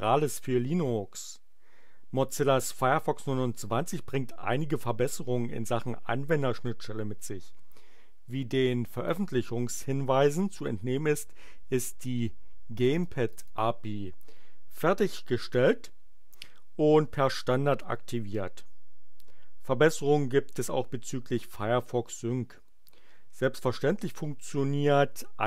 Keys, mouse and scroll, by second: 9.0 click, 12.7 click, 13.3 click.